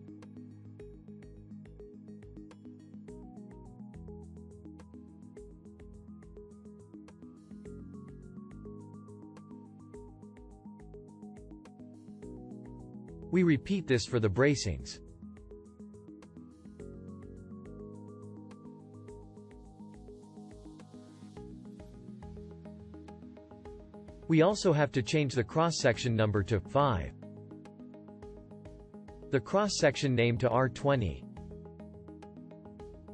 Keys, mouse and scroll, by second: 2.9-6.2 shift+drag, 17.9-19.1 drag, 21.4-25.4 shift+drag.